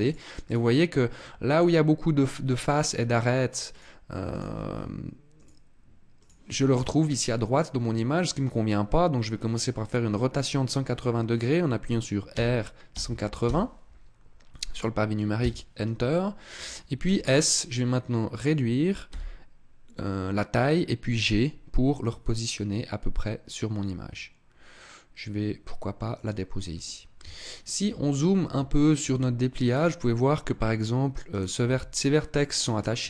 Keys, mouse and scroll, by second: 0.4 click, 1.0 middle click, 3.5 click, 5.2 click.